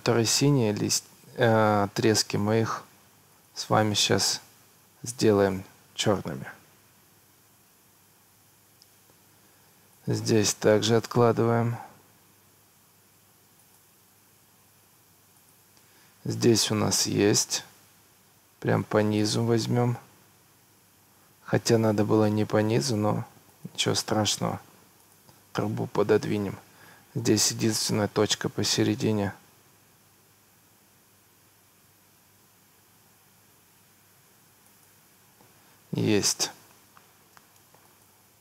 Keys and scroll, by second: 3.8 Escape, 14.0 Escape, 23.9 Escape.